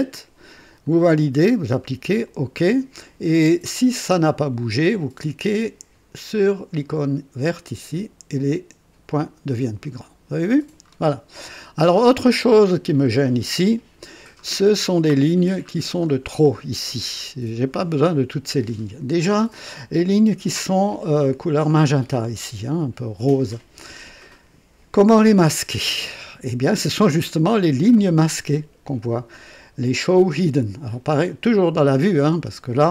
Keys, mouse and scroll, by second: 0.8 click, 2.2 click, 7.5 click, 10.9-11.4 scroll down 2, 12.1-13.0 middle drag, 13.0 scroll up 1, 14.4 scroll up 1, 15.1-15.7 middle drag, 16.0-16.3 scroll up 1, 17.1-17.8 middle drag, 18.6-19.0 scroll up 1.